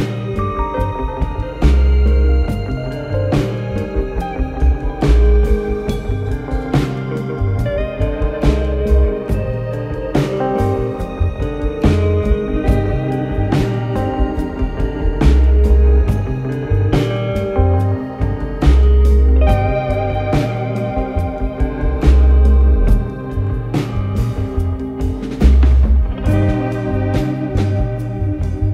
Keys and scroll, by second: 12.0 Delete, 13.9 ctrl+z, 22.0 ctrl+z, 24.2 Delete.